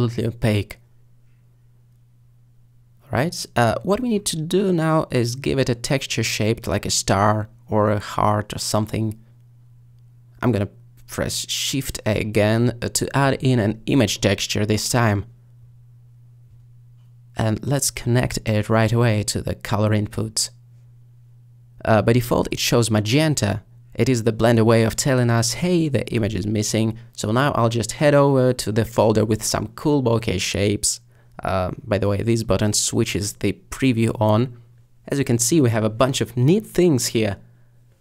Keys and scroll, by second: 11.6 a.